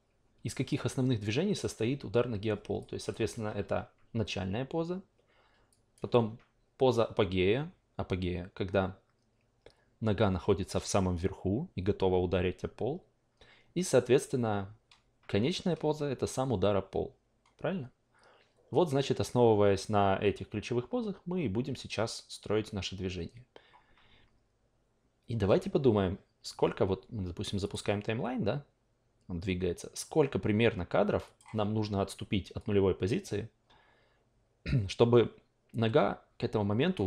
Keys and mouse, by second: 0.7-1.6 alt+drag, 2.8 alt+click, 5.7 alt+click, 27.6 click, 31.2 click, 32.6-36.9 drag.